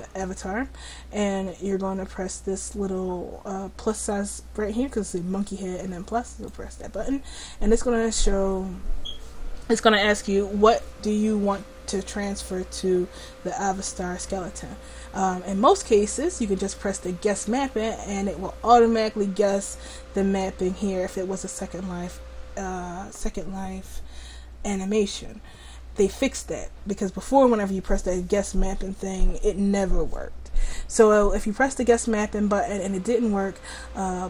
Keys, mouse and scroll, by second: 11.1-34.2 drag.